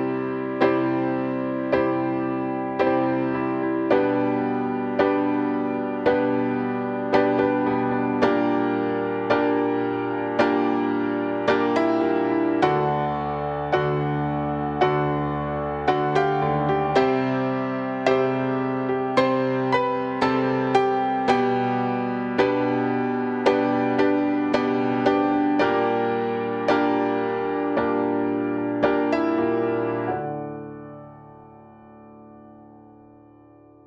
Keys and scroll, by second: 29.9 ctrl+e.